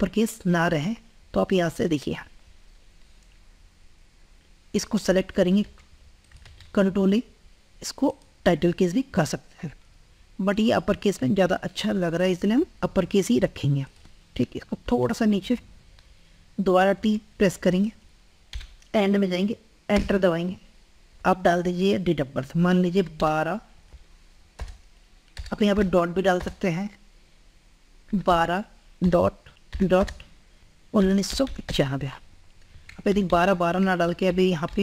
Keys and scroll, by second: 6.2 ctrl+a, 10.2 ctrl+a, 32.9 ctrl+Left, 33.8 ctrl+Left.